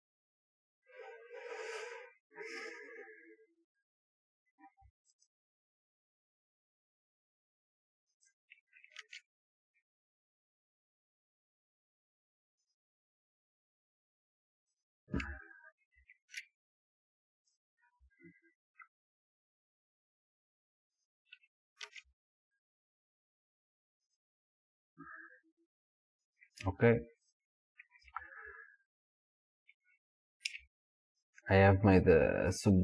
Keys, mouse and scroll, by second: 8.3 click, 9.0 ctrl+r, 14.9 click, 16.0 ctrl+r, 21.1 click, 21.9 ctrl+r, 26.4 click, 27.3 click, 30.5 Tab, 32.7-32.8 middle drag.